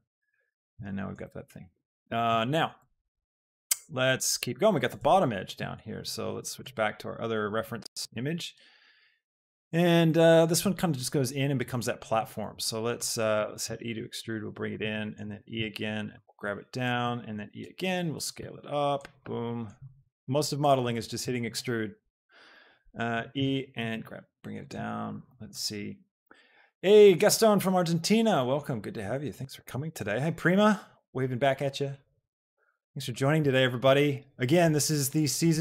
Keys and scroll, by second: 13.3 alt+e, 13.7 Escape, 14.1 s, 15.5 shift+Escape, 16.3 z, 17.4 e, 17.7 Escape, 18.5 s, 19.9 s, 23.2 shift+Escape, 24.0 z.